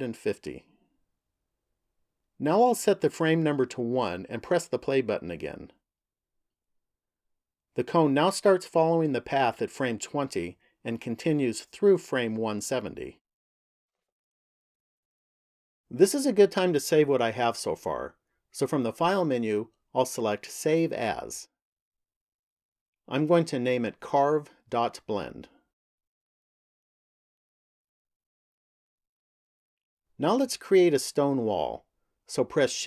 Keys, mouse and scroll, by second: 4.2 click, 5.6 click, 14.9 click, 20.3 click, 29.6 click.